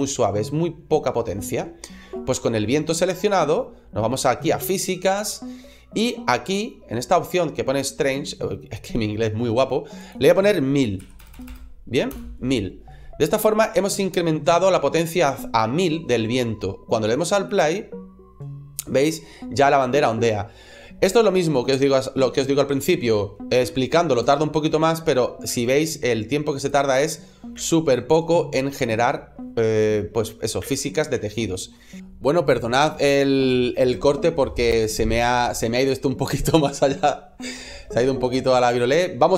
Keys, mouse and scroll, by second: 9.8 click, 11.2 KP_0, 11.3 KP_0, 17.3 click, 23.3 space, 24.0 space, 25.3 space, 26.4 click, 27.4 space, 30.5 space, 31.2 shift+middle click.